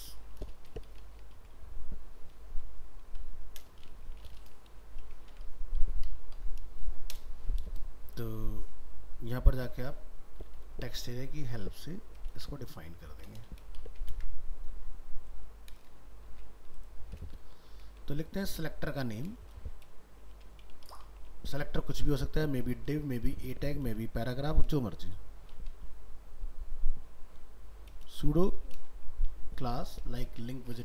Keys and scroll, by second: 1.4 ctrl+s, 5.3 ctrl+s, 12.3 ctrl+c.